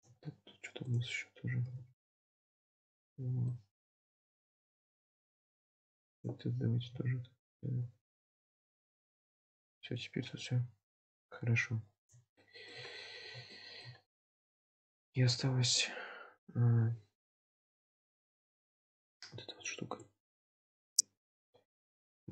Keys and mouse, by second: 0.1 Tab, 0.9 click, 1.7 g, 3.1 Tab, 3.6-5.1 middle drag, 5.3 Tab, 6.2 click, 6.9 g, 7.9 Tab, 8.4-11.7 middle drag, 12.5 shift+middle drag, 13.6 shift+middle click, 14.4-14.7 middle drag, 18.6 click, 21.0-21.4 shift+middle drag, 22.2 click.